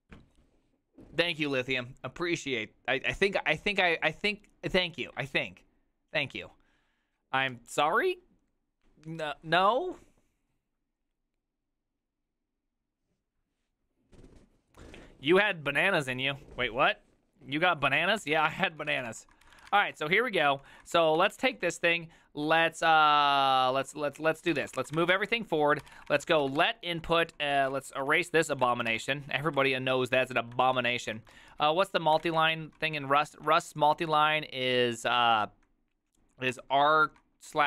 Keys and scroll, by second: 18.3 alt+{, 18.7-22.0 typing, 23.3 ctrl+u, 23.7-30.1 typing, 30.7 ctrl+c, 31.2 k, 31.4 ctrl+u, 31.6 ctrl+u, 32.2 ctrl+d, 32.8-34.1 typing, 36.6-37.6 typing.